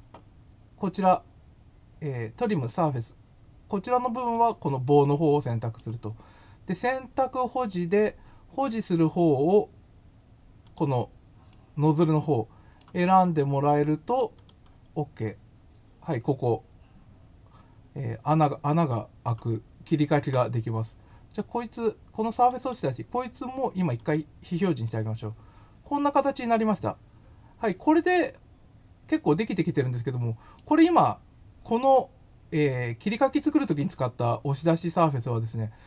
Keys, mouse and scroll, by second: 4.3 click, 5.0 middle click, 10.6 click, 11.4-12.8 middle drag, 14.3 click, 15.1 middle click, 17.7-19.2 middle drag, 22.5 right click, 23.9 click, 24.8-27.6 middle drag, 28.0-30.5 middle drag, 33.0 middle click.